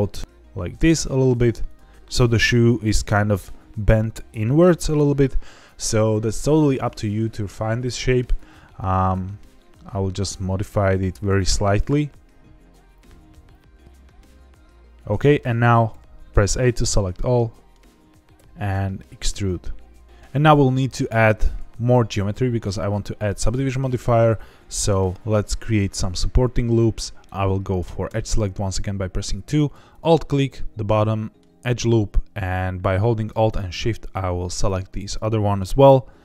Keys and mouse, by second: 1.6 click, 8.1 click, 8.4 g, 11.1 click, 11.6 click, 11.9 g, 12.7 click, 12.9 click, 12.9 g, 13.4 click, 13.8 click, 13.9 g, 14.9 click, 15.8 a, 16.5-17.7 middle drag, 18.3 e, 28.0 2, 30.5 middle click, 33.9 alt+shift+click, 35.0 alt+shift+click, 35.8 middle click.